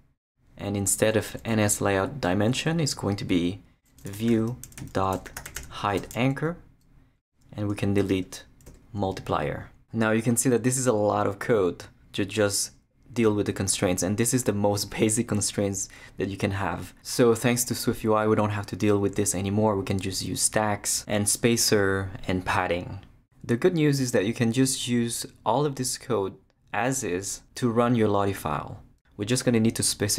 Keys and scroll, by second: 3.8-6.1 typing, 8.7 shift+BackSpace, 9.3 BackSpace.